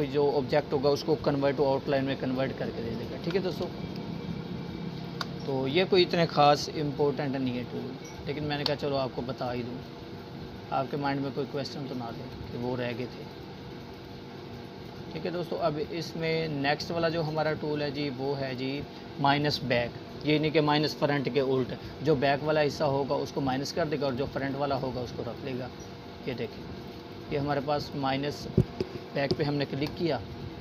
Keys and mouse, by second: 0.1 space, 0.5 click, 0.6-1.7 space, 2.2 click, 3.4-4.4 alt+shift+drag, 14.8-15.2 click.